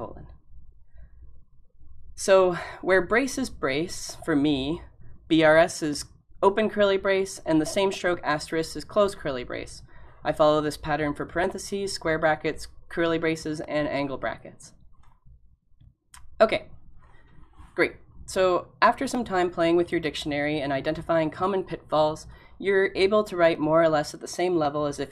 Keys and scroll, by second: 15.0-15.8 typing.